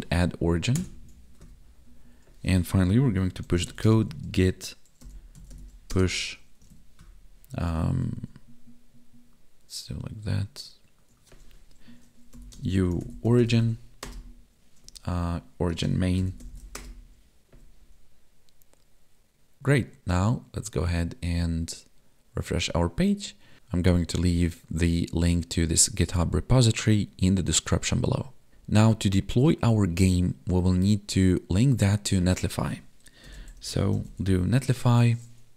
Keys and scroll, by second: 3.9 space, 5.9 space, 12.5 space, 15.1 Up, 15.8 space.